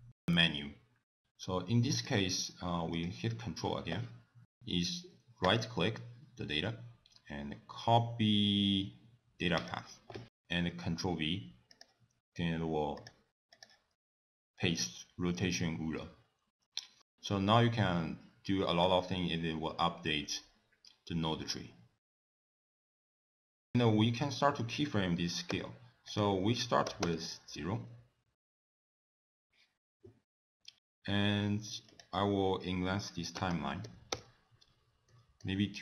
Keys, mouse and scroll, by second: 1.5 click, 5.4 right click, 9.6 click, 12.8 click, 15.9 t, 16.4 middle click, 16.8-17.2 scroll down 4, 17.0 middle click, 17.3 scroll up 1, 17.4 scroll down 2, 19.6 click, 22.6 middle click, 22.6 scroll up 1, 22.7 scroll down 2, 22.8 click, 22.9 scroll up 3, 23.1 click, 23.3 click, 23.6 middle click, 25.5 i, 26.1 click, 31.9 click, 33.5 2, 35.1 middle click.